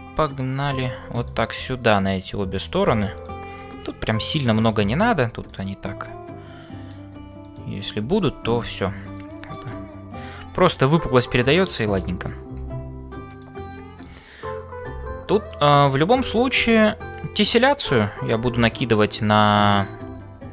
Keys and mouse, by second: 0.0-20.5 typing, 1.8 click, 3.6 middle click, 5.9-7.0 middle drag, 7.5 click, 9.0 middle click, 11.4 click, 11.9 middle click, 14.1 click, 16.3 middle click, 17.1-18.2 middle drag.